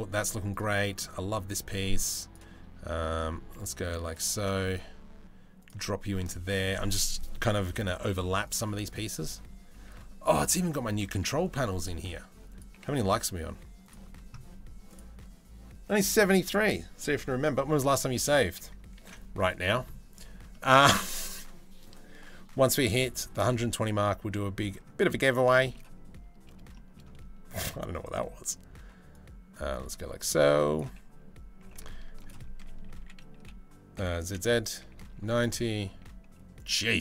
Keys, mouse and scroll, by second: 0.5 middle click, 2.5 click, 3.4 s, 4.0 g, 9.4 s, 10.2 g, 11.6 s, 12.3 g, 17.8 click, 19.1 ctrl+s, 20.1-21.6 middle drag, 22.2 middle drag, 25.2 shift+middle drag, 26.4 shift+middle drag, 27.7 middle click, 28.7 click, 29.8 s, 31.3 g, 32.2 r, 35.5 s.